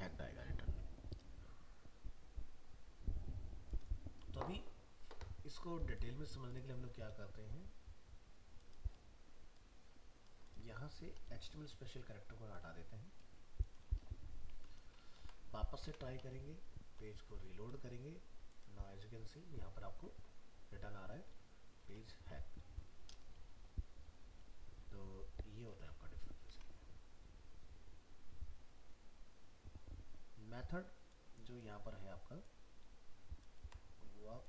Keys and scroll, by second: 15.2 ctrl+s, 15.8 alt+Tab, 21.9 alt+Tab, 25.6 alt+Tab, 33.6 ctrl+x.